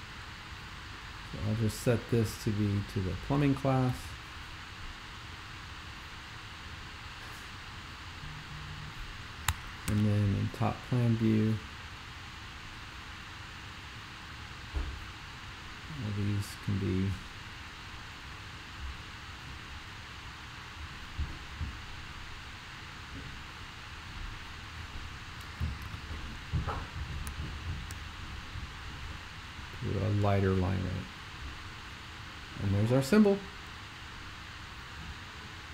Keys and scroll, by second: 3.7-4.5 typing, 9.9 super+5, 25.9 super+f.